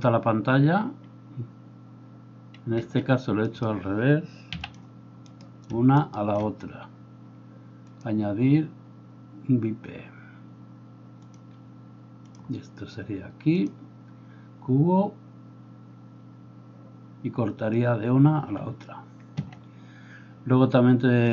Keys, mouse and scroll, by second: 2.8 Escape, 3.4 right click, 4.5 x, 5.2 right click, 6.0 right click, 19.4 Escape.